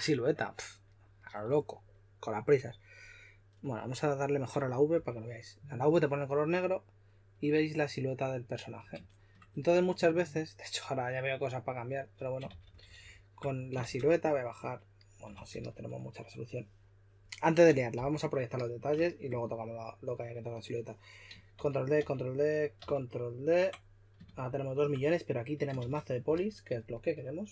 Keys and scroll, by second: 12.2-13.8 typing, 15.0-16.0 typing, 17.9 typing, 21.5 super+d, 22.0 super+d, 22.8 super+d, 24.2 shift+f, 25.8 shift+f, 26.3 s.